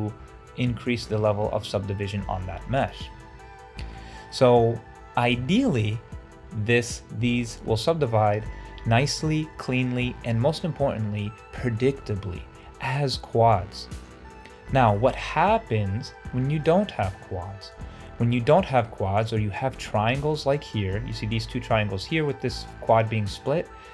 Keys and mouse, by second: 0.0 ctrl+alt+a, 2.7 click, 2.9 Delete, 3.8 shift+click, 3.9 shift+middle drag, 8.0-8.3 shift+middle drag, 13.6 shift+middle click, 14.6 shift+middle drag, 17.3 shift+middle click, 18.9 shift+middle click.